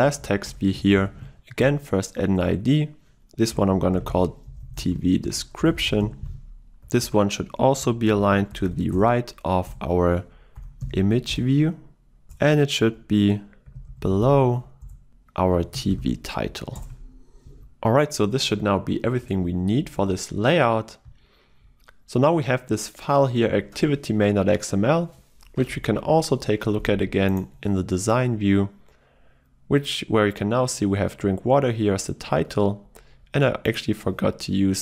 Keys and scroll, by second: 1.7 Return, 9.0 Return, 20.7 ctrl+s.